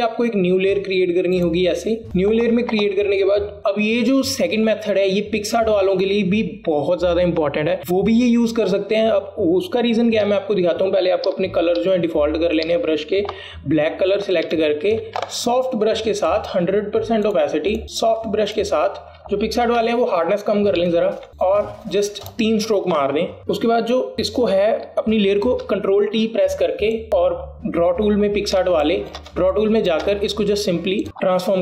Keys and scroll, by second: 11.4 x, 12.9 x, 26.5 ctrl+t, 29.7 alt+space, 30.4 alt+space, 31.0 space.